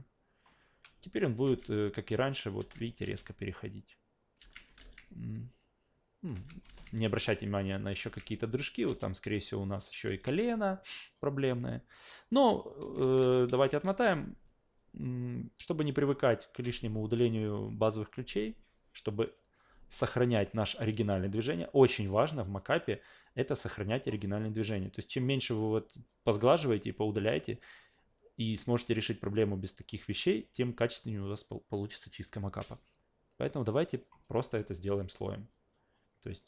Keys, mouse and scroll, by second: 1.1 click, 1.4 alt+v, 2.6 alt+v, 2.8 click, 3.0 alt+v, 4.4 alt+v, 4.6 click, 4.8 alt+v, 6.3 alt+v, 6.5 click, 6.7 alt+v, 8.0 alt+v, 8.7 click, 8.9 alt+v, 10.0 alt+v, 11.1 click, 12.8 ctrl+z, 13.0 ctrl+z, 13.2 ctrl+z, 13.5 ctrl+z, 13.7 ctrl+z, 14.0 ctrl+z, 24.1 scroll down 2, 24.7-25.1 scroll down 2, 33.6 click, 35.5 click.